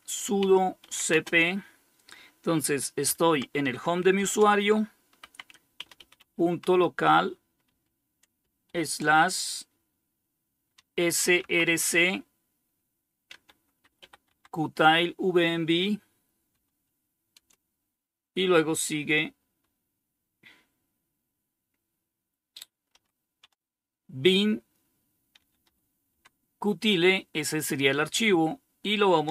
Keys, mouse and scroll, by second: 0.0-0.3 typing, 2.2 typing, 3.4-7.9 typing, 10.0-10.6 typing, 12.5-13.7 typing, 15.7-16.6 typing, 22.1 typing, 22.7 Tab, 24.3-25.1 typing, 25.3 Tab.